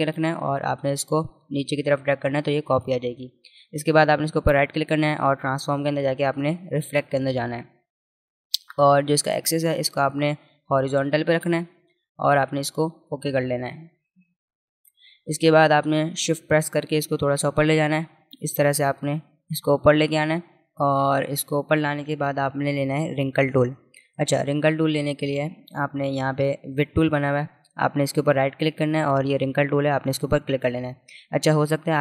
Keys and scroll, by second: 21.2 space, 21.7 alt+space.